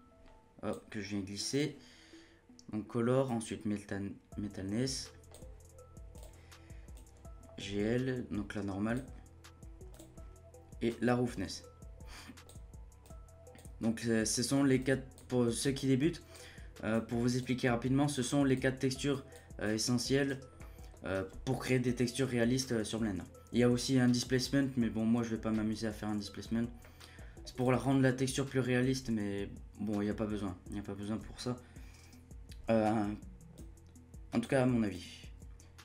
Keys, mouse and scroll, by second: 13.0 click, 14.8-18.2 drag, 19.1-20.6 drag, 20.6-26.4 middle drag, 26.4-26.8 scroll up 2, 26.8 middle click, 27.6 click, 30.0-33.5 middle drag, 33.5 click, 34.9-35.8 drag.